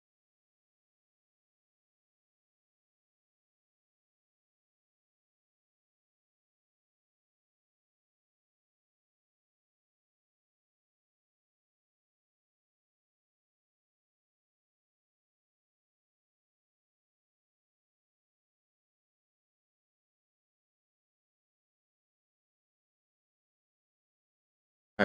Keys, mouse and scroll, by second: 0.1 click, 0.7 g, 1.5 click, 2.0-3.0 middle drag, 3.6 click, 3.9 middle click, 4.6 click, 5.1 middle click, 6.1 g, 7.1 click, 7.5-14.3 middle drag, 16.1 g, 17.2 click, 17.7-20.2 middle drag, 20.6 click, 21.0 g, 21.9 click, 24.3-25.0 middle drag.